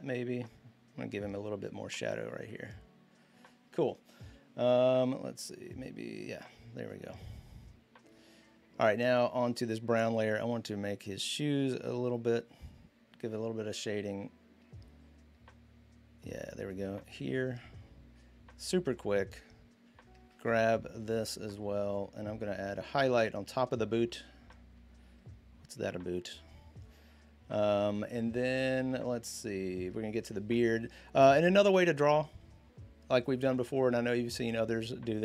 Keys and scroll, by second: 31.5 l.